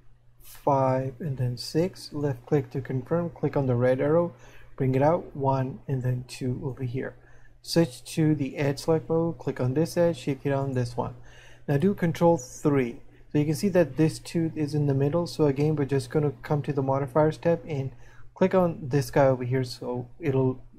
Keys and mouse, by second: 4.4 click, 8.4 click, 18.8 click.